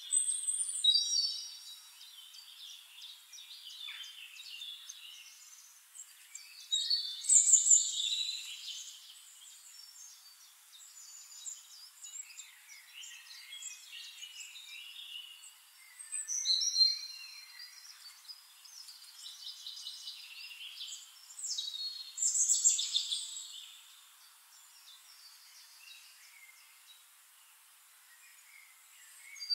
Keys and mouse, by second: 0.1 shift+click, 0.6 shift+click, 1.2 click, 2.8 click, 3.3 click, 4.1 KP_8, 4.5 Return, 5.9 click, 6.5 click, 7.3 shift+-, 8.1 click, 8.8 click, 9.1 click, 11.2 click, 11.6 click, 12.7 click, 13.8 click, 14.3 click, 15.4 click, 16.4-16.8 drag, 17.9 click, 18.4 middle click, 19.4 click, 20.6 Caps_Lock, 21.6-23.3 typing, 23.4 ctrl+a, 23.9 ctrl+click, 24.2 ctrl+a, 24.7 s, 25.4 click, 26.6 shift+click, 27.5 click, 28.6-29.3 ctrl+drag.